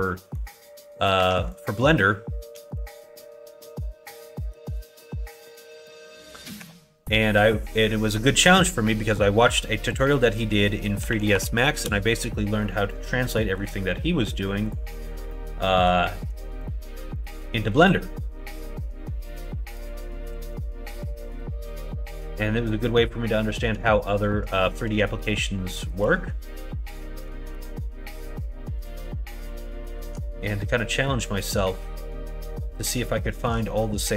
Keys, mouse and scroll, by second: 0.1 middle click, 1.1 1, 1.5 click, 2.5 g, 4.6 ctrl+z, 5.4 shift+click, 6.6 ., 11.0 s, 12.9 middle click, 13.3 middle click, 14.6 click, 15.2 middle click, 17.1 shift+click, 17.5 middle click, 19.2 shift+click, 20.3 s, 22.0 2, 22.4 middle click, 24.5 middle click, 25.8 shift+click, 26.1 middle click, 27.5 ctrl+e, 29.5 middle click, 29.9 middle click, 30.2 middle click, 31.1 middle click, 31.7 click, 32.4 middle click, 33.1 shift+middle click.